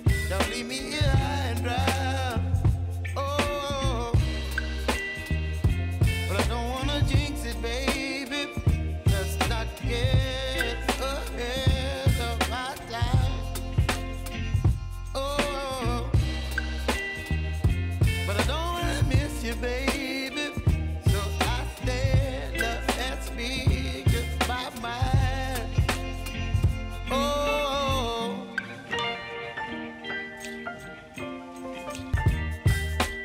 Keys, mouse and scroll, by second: 1.5 click, 2.6 k, 3.6 click, 4.4 space, 7.0 click, 7.4 space, 10.8 click, 12.6 ctrl+d, 14.9 ctrl+d, 15.7 click, 19.1 s, 20.3 u, 21.4-23.7 drag, 24.0 Return, 24.6-27.0 typing, 28.8-33.2 drag.